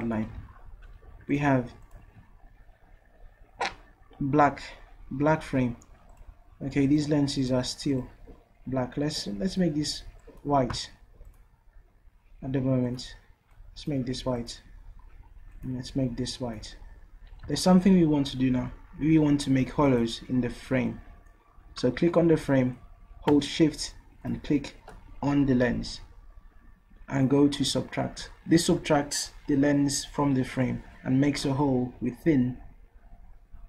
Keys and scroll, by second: 1.1 v.